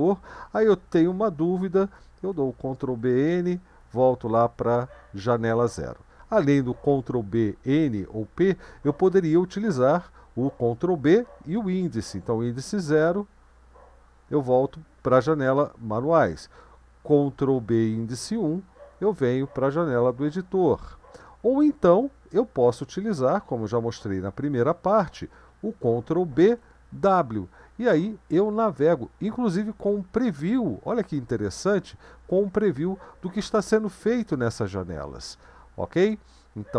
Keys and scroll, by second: 2.9 ctrl+b, 10.9 ctrl+b, 12.6 0, 17.6 ctrl+b, 18.2 1, 26.4 ctrl+b, 26.9 w, 27.9 Up, 28.5 Down.